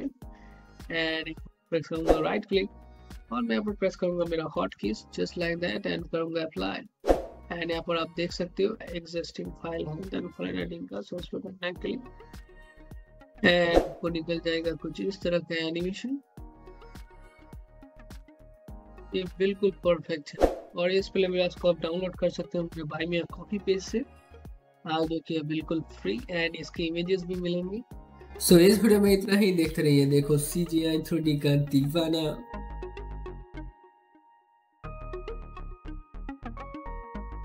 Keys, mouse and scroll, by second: 1.3 right click, 3.2 click, 4.7 ctrl+F1, 5.8-9.5 drag, 9.7 click, 15.7-22.4 drag.